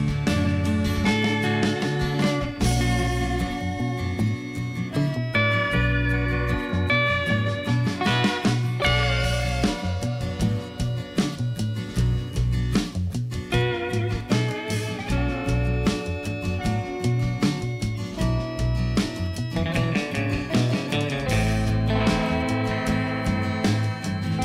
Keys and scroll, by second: 3.5 Tab, 4.1 g, 4.3 z, 5.4 Tab, 9.0 i, 9.5 i, 11.3 i, 14.1 alt+a, 14.4 Tab, 16.5 ., 16.6 0, 16.7 2, 16.8 Return, 19.2 Tab, 20.5 Tab, 20.7 alt+a.